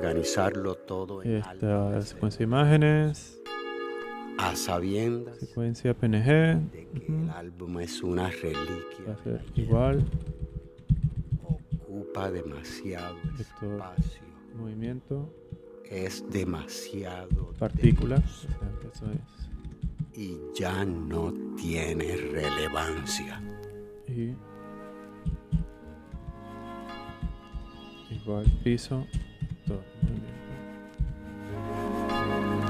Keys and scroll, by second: 9.3 Right, 9.5 Left, 10.7 shift+Left, 13.2 shift+v, 13.9 shift+m, 15.6 shift+-, 17.0-20.4 typing, 25.2 v, 25.4 m, 26.1 BackSpace, 27.1-31.5 typing.